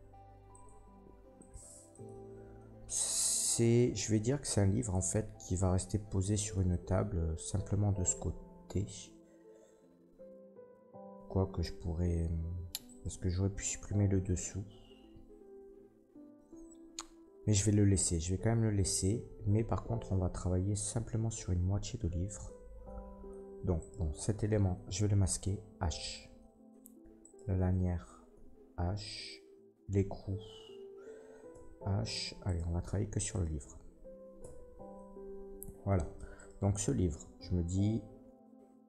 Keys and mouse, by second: 0.5-1.5 drag, 1.5-1.9 middle drag, 1.9 click, 2.1-4.9 middle drag, 4.9-23.7 drag, 12.8 middle click, 12.8 right click, 23.7 middle click, 23.8-27.2 drag, 25.9 h, 27.2 middle click, 27.3-29.1 drag, 28.3 h, 29.1 middle click, 29.2-38.8 drag, 32.4 middle click, 32.4 right click, 32.4 h, 32.8 h, 33.3 middle click, 33.3 right click, 34.4 h, 36.3 middle click, 36.3 right click.